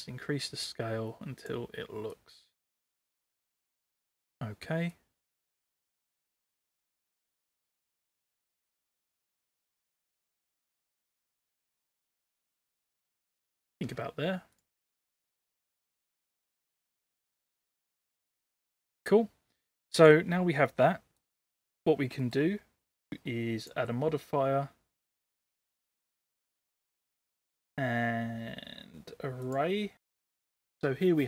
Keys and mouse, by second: 2.3-4.2 drag, 4.9-6.9 drag, 10.4-13.8 drag, 15.0-16.1 middle drag, 16.2-18.3 middle drag, 21.2 click, 22.3 middle click, 23.7-29.6 drag.